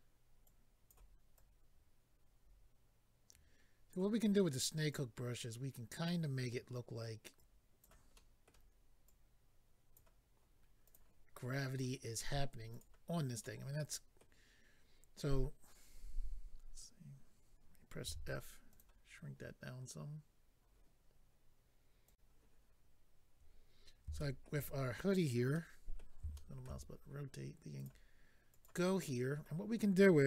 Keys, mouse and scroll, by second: 0.4 click, 1.3 click, 4.2-4.6 scroll up 2, 4.9 click, 7.4 click, 8.1 middle click, 9.0 click, 10.8 click, 10.9 click, 11.7 click, 12.8 click, 13.4 middle click, 16.3-17.5 scroll down 1, 18.7 click, 18.7 f, 18.8 click, 22.0 click, 22.1 click, 24.2 shift+middle click, 25.5 middle click, 26.3 shift+middle click, 26.7 middle click, 26.8-27.2 scroll up 3, 27.8 click, 27.8 click, 28.5 click, 28.6 click, 29.1 middle click.